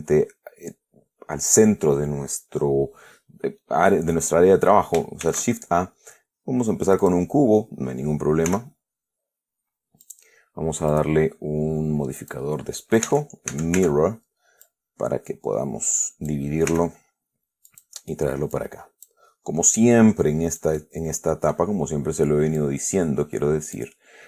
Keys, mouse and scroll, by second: 5.5 shift+a, 7.3 click, 8.8 s, 10.3 click, 11.2 click, 12.5 click, 13.4 Caps_Lock, 14.1 Tab, 14.9-16.8 drag, 17.0 s, 18.0 click, 18.8 click, 20.1-22.0 drag, 22.1 scroll up 1, 22.9-24.2 drag.